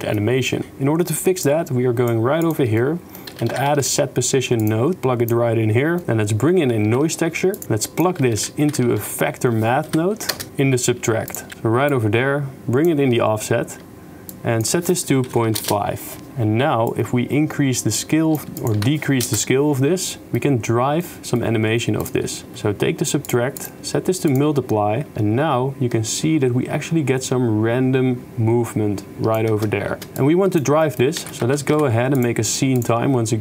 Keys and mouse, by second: 0.5 click, 1.4 click, 2.4 click, 2.7 click, 3.3 shift+a, 4.9-6.0 drag, 6.9 shift+1, 7.6-11.6 drag, 10.5 BackSpace, 11.9-12.9 drag, 14.5 shift+click, 15.0 right click, 16.9-18.5 shift+right drag, 18.6 right click, 20.3 middle click, 21.2 middle click, 22.0 click, 22.6 shift+d, 23.7-24.4 drag, 25.1-28.2 shift+right drag, 28.2-29.4 shift+drag, 29.6 shift+space, 30.0 shift+space, 30.3 click, 30.9 middle click, 31.2 shift+a.